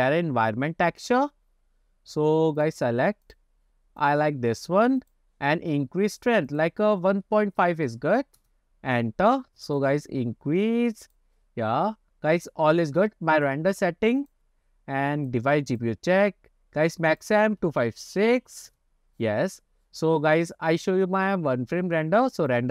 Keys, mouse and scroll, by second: 1.0 click, 6.5-8.5 drag, 10.0 click, 11.1 click, 12.4 click, 13.4-14.4 drag, 15.2-15.9 drag, 17.1-18.8 drag, 21.2-22.7 drag.